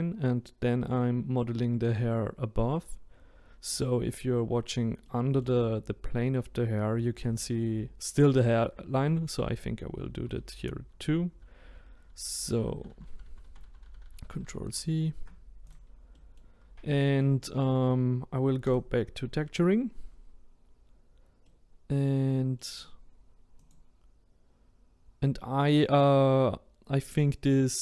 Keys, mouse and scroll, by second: 3.7-9.9 middle drag, 9.9 ctrl+z, 10.2 ctrl+z, 10.6 ctrl+z, 10.9 ctrl+z, 11.6 ctrl+z, 12.0-13.3 ctrl+z, 13.5 ctrl+z, 13.6 ctrl+z, 13.8 ctrl+z, 14.0 ctrl+z, 14.2 ctrl+z, 14.5 ctrl+z, 14.7 ctrl+z, 15.7 click, 16.1 middle click, 16.6-17.0 scroll down 3, 17.0-18.7 middle drag, 18.7-21.5 drag, 21.5-23.7 middle drag, 23.7 click, 25.7-26.3 middle drag, 26.3-26.9 scroll up 1, 26.9-27.8 middle drag.